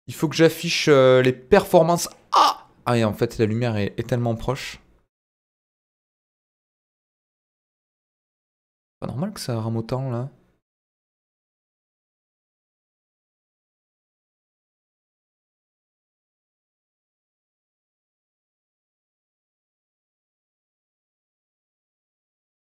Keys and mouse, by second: 0.5-1.9 middle drag, 3.4 click, 4.4 g, 4.5 middle click, 5.7-7.3 middle drag, 7.8 ctrl+z, 8.5 click, 11.4 click, 17.1-18.1 middle drag.